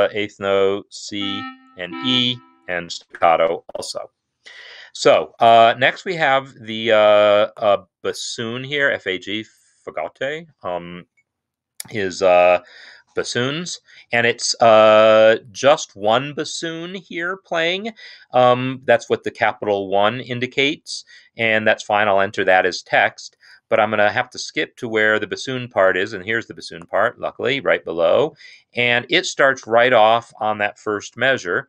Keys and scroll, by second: 0.0-2.6 typing, 4.9 Escape, 31.3 n.